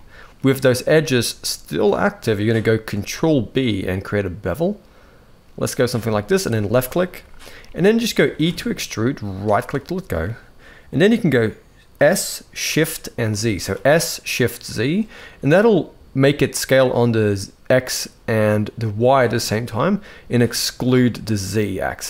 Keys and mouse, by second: 2.7 ctrl+b, 7.4-7.7 middle drag, 8.1 e, 11.7 s.